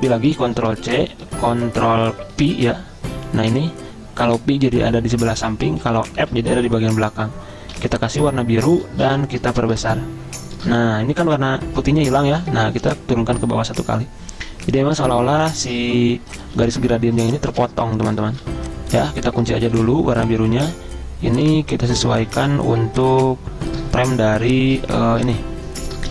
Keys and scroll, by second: 0.6 ctrl+c, 2.4 ctrl+v, 5.8 ctrl+z, 6.2 ctrl+f, 7.8 i, 9.1 v, 13.0 ctrl+[, 16.6 z, 18.4 v, 19.8 ctrl+2.